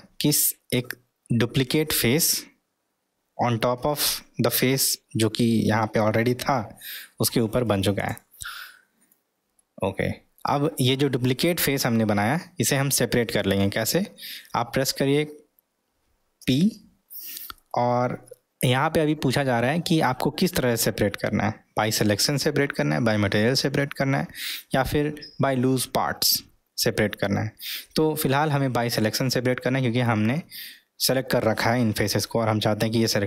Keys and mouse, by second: 9.6-10.3 middle drag, 16.4 p.